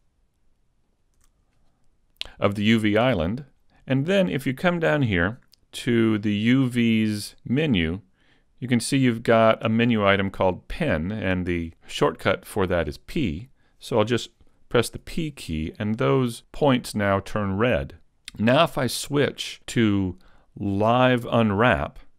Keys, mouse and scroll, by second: 0.9 shift+right click, 5.8 middle click, 15.1 p.